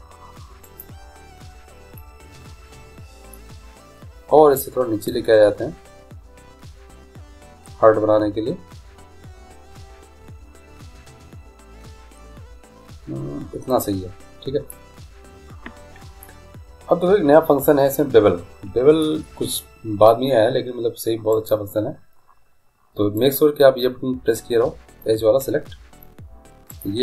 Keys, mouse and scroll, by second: 2.0-4.4 middle drag, 5.0 right click, 5.1-6.9 drag, 16.2-18.8 middle drag, 19.5-21.3 middle drag, 21.3 right click, 23.2-24.9 drag, 26.7-27.0 right drag.